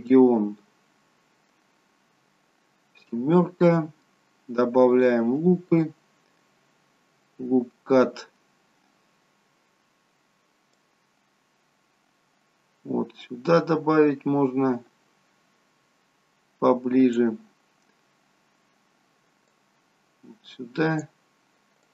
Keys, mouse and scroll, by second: 0.0 middle click, 3.0 KP_7, 4.9 click, 10.7 click, 19.5 click.